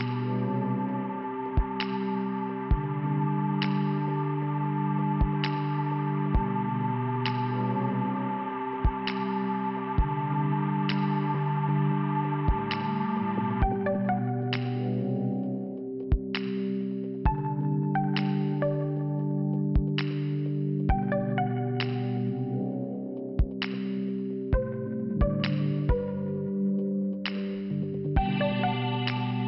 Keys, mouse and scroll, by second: 1.3 shift+Return, 2.4 click, 3.8 middle click, 4.3 scroll up 2, 5.2 click, 6.3 click, 7.4 click, 9.0 click, 10.1 click, 10.8 click, 10.8 click, 11.7 click, 13.0 click, 13.6-13.9 scroll down 2, 17.5 click, 26.0 Return, 26.8 click.